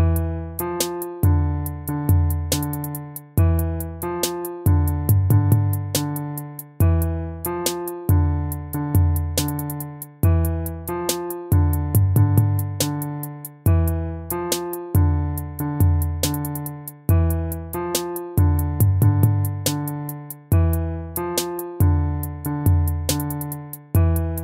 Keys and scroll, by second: 2.9 ctrl+z, 3.9 ctrl+-, 21.0 ctrl+c, 21.1 ctrl+v.